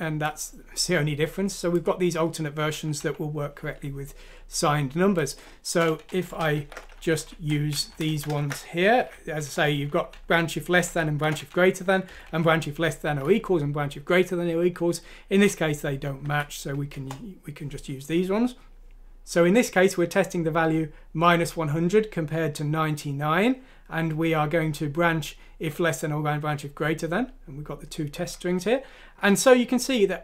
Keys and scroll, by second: 6.1-7.1 typing, 7.8 Down, 7.9 Left, 8.1 Left, 8.3-11.2 typing, 9.5 Up, 9.6 Up, 12.1 Delete, 12.3 Delete, 13.7 typing, 16.2 F6, 16.9 Return.